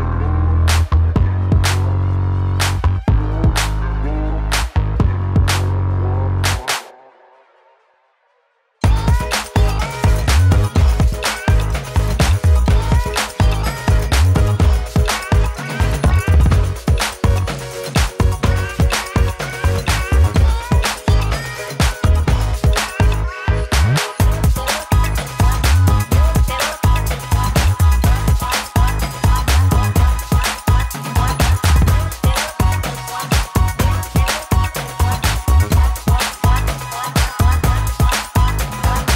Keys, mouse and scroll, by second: 25.9-27.5 drag, 29.0 shift+Page_Down, 30.5 shift+click, 31.3-31.6 shift+drag, 39.0 click.